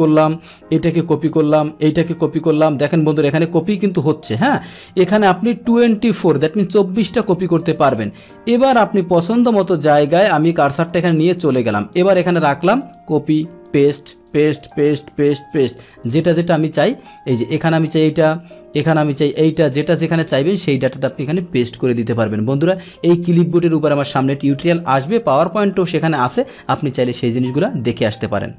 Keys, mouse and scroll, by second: 0.4 click, 1.1 ctrl+c, 1.5 click, 2.1 ctrl+c, 2.5 click, 3.3 ctrl+c, 4.4 click, 4.9 ctrl+c, 9.0 click, 10.7 click, 11.9 click, 12.8 click, 13.6 click, 14.1 click, 14.6 click, 14.9 click, 15.4 click, 15.7 click, 16.0 click, 16.4 click, 17.1 click, 17.8 click, 18.7 click, 19.4 click, 20.5 click, 27.4 click.